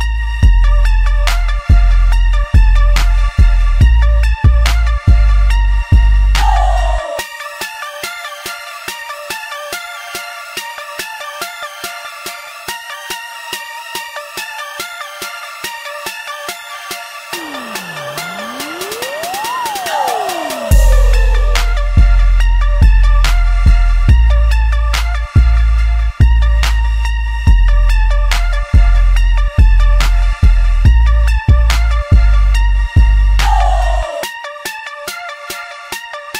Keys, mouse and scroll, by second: 5.9 click, 6.1 click, 6.5 x, 8.2 g, 11.3-23.5 middle drag, 23.7 g, 27.8 click, 28.7 ctrl+click, 29.4 middle click, 30.3 e.